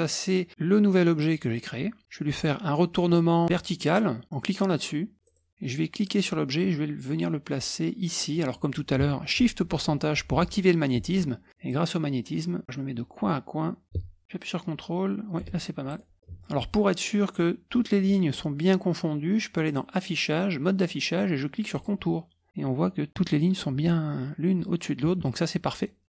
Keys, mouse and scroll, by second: 1.2 click, 5.2 click, 6.0-8.7 drag, 10.3 shift+5, 11.7-16.2 drag, 16.2 ctrl+middle click, 16.5 ctrl+scroll up 1, 19.6 click, 21.7 click, 22.5-22.9 scroll up 1, 23.9-25.2 ctrl+scroll down 2, 25.8 ctrl+middle click.